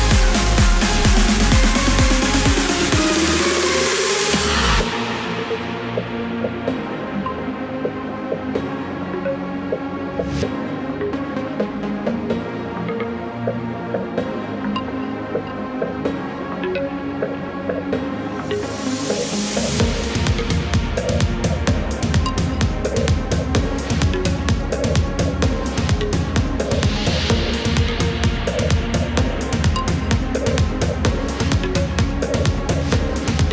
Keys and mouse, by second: 0.6 Return, 7.5 click, 8.6 KP_8, 9.0 Return, 12.0 right click, 14.3 right click, 19.6 click, 20.9 KP_0, 21.3 Return, 22.6 click, 23.3 KP_0, 23.6 Return, 25.1 click, 26.0 KP_0, 26.4 Return, 27.6 click, 28.4 KP_2, 28.7 KP_2, 29.1 KP_2, 29.3 KP_2, 30.4 KP_8, 31.0 KP_8, 32.2 KP_8, 33.0 KP_2.